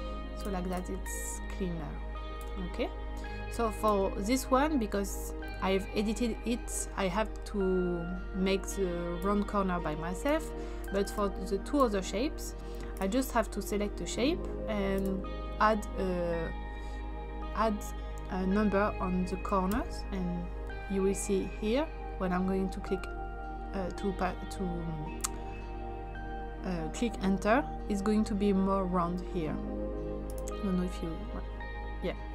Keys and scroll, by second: 10.1 space, 19.7 4.